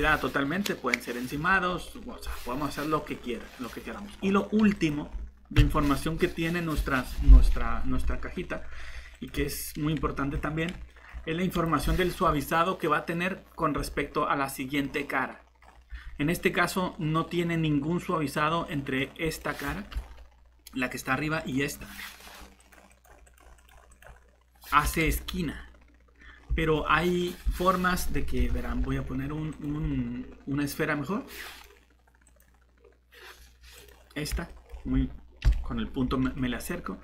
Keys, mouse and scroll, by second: 5.6 Delete, 8.0-9.3 typing, 19.9 shift+Tab, 25.0 Tab, 28.4 shift+Delete.